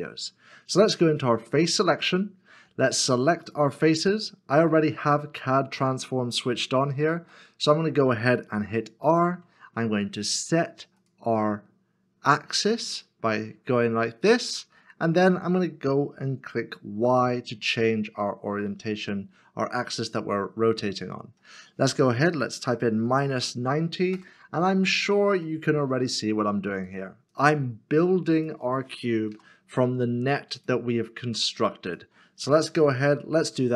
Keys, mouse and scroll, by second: 1.5 3, 3.5 shift+click, 6.8 scroll up 1, 7.5 shift+middle click, 9.2 r, 17.0 y, 23.0 -, 23.2 9, 23.4 0, 24.1 Return, 25.5 shift+middle click, 27.4 shift+click, 28.4 shift+l, 29.5 r, 32.7 r, 33.5 y.